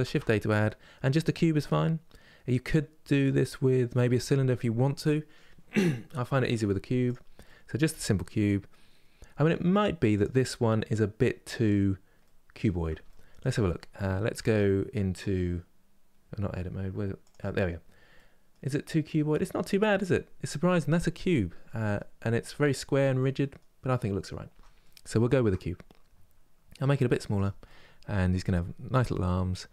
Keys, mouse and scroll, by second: 7.1-9.0 middle drag, 9.0 s, 11.5 scroll up 3, 11.9-13.3 middle drag, 13.3-14.1 scroll down 2, 14.1 Tab, 17.0 click, 17.4-17.8 scroll down 2, 17.8-24.2 middle drag, 24.2 Tab, 24.5 middle click, 25.3-26.5 scroll up 2, 26.6 s, 27.4-29.3 middle drag, 29.3 3.